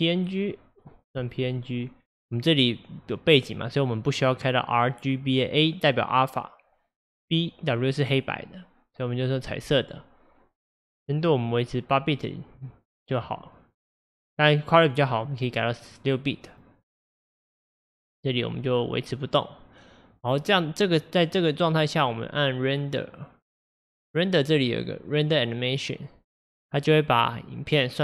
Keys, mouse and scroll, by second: 1.3-4.2 drag, 8.9 click, 15.1 click, 15.9 click, 16.5 click, 17.9 click.